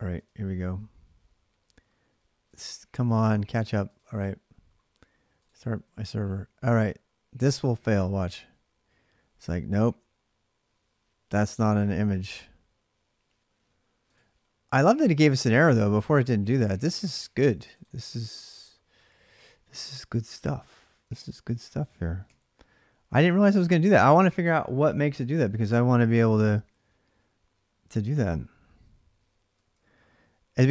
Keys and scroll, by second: 16.3 alt+Tab, 21.2 ctrl+a, 22.0 2, 22.9 ctrl+[, 23.0 ctrl+j, 29.3 k, 29.5 k, 30.6 alt+Tab.